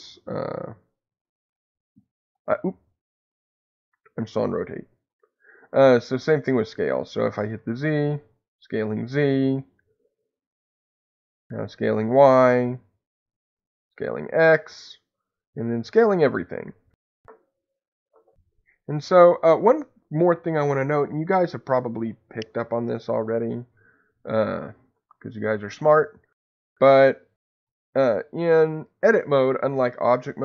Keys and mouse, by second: 3.8 Escape, 4.9 click, 7.4-9.2 drag, 9.2 Escape, 10.3-12.2 drag, 12.1 Escape, 13.4-14.5 drag, 14.5 Escape, 15.3-16.6 drag, 16.6 Escape.